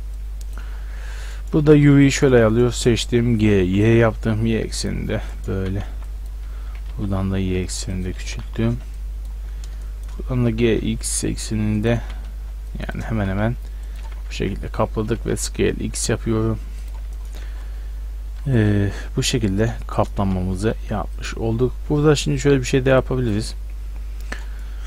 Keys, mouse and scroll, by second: 0.9-1.9 middle drag, 1.6 a, 1.9 b, 3.4 g, 5.1 middle click, 5.6 a, 5.9 b, 6.7 g, 8.3 a, 8.7 b, 10.4 g, 12.0 a, 12.3 b, 13.2 g, 14.1 a, 14.5 Tab, 15.1 s, 17.5 Tab, 18.5 Tab, 20.3 g, 23.0-24.6 drag, 24.6 middle drag.